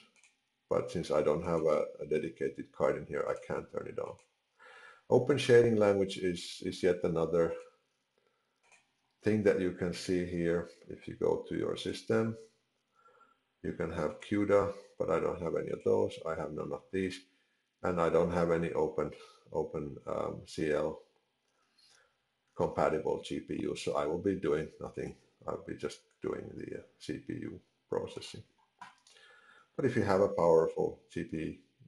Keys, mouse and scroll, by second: 1.5 click, 3.2 click, 7.5 click.